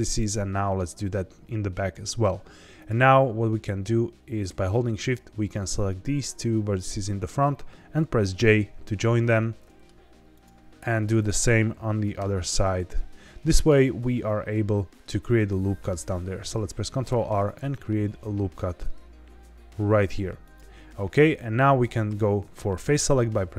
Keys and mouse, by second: 4.9 shift+click, 8.3 j, 9.3 middle click, 11.1 shift+click, 12.1 j, 12.6-13.6 middle drag, 17.0 ctrl+r, 20.4 click.